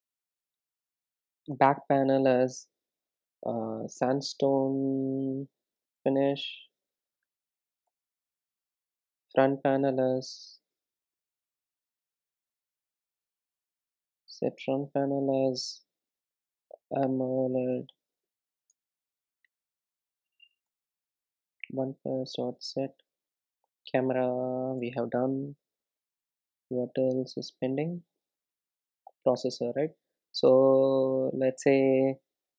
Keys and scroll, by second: 8.8 Return, 21.6 Return, 29.4 Return.